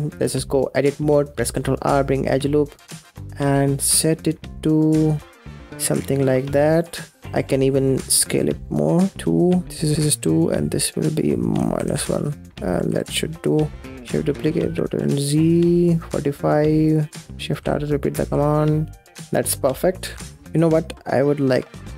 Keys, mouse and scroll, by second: 0.2-1.3 middle drag, 1.3 ctrl+r, 7.2 scroll down 2, 7.3 middle click, 8.1 scroll up 5, 8.4 middle click, 9.1 click, 10.3-12.5 drag, 12.8 ctrl+s, 13.0-13.3 scroll down 3, 13.3 middle click, 13.8 shift+d, 17.5 shift+r, 18.1 shift+r, 19.2 middle click, 19.5 space, 20.0 ctrl+s, 20.1 scroll up 5, 20.3 scroll down 6, 20.5 middle click, 21.4-21.9 scroll up 3.